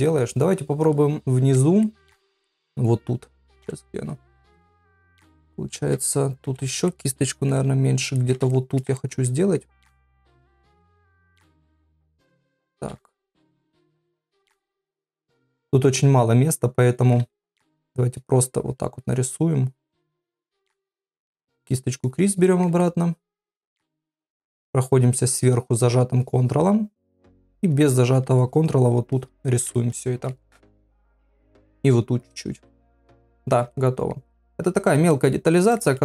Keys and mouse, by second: 1.2 shift+middle click, 1.8 ctrl+middle click, 2.4 middle click, 3.6 KP_7, 4.6 shift+middle click, 6.4 [, 6.6 [, 6.9 middle click, 8.2 ctrl+middle click, 8.5 shift+middle click, 9.0 ctrl+middle click, 9.3 middle click, 10.9 click, 11.7 click, 12.5 ctrl+z, 12.8 ctrl+z, 13.3 click, 14.3 click, 15.2 click, 15.6 ctrl+z, 16.0 click, 17.2 ctrl+z, 17.7 ctrl+z, 18.1 click, 19.0 click, 19.9 click, 20.4 click, 21.9 click, 22.4 middle click, 22.8 ctrl+middle click, 23.8 shift+middle click, 24.6 ctrl+click, 25.0 ctrl+click, 25.3 ctrl+click, 25.6 ctrl+click, 25.9 ctrl+click, 26.2 ctrl+click, 26.4 ctrl+click, 27.4 click, 27.7 click, 28.1 click, 28.4 click, 29.1 click, 29.4 click, 29.8 shift+middle click, 30.5 shift+middle click, 31.9 click, 32.2 click, 32.6 click, 33.0 ctrl+middle click, 33.7 middle click, 34.3 middle click, 35.1 ctrl+middle click.